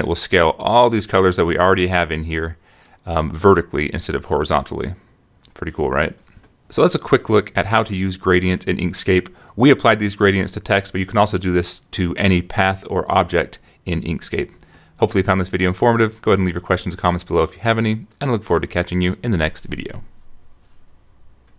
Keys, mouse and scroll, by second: 4.0 click, 4.4 click, 5.0 click, 5.2 right click, 5.7 click, 6.0 click, 7.8 click, 9.2-12.1 drag, 13.2-16.5 drag, 18.4 click, 19.2-20.4 drag, 21.0 click.